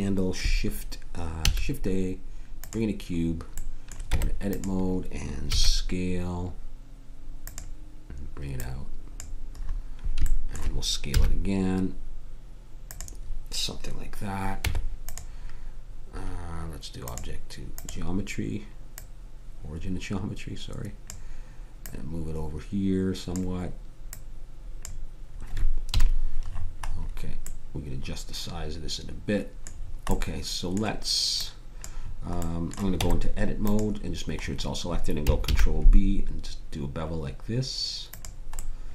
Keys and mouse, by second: 1.4 shift+a, 4.1 Tab, 5.5 s, 8.6 click, 11.2 s, 15.2 Tab, 17.0-18.9 drag, 20.5 click, 20.9 middle click, 21.8 click, 26.0 KP_Decimal, 26.6 middle click, 29.8 middle click, 32.4 click, 33.0 Tab, 35.4 ctrl+b.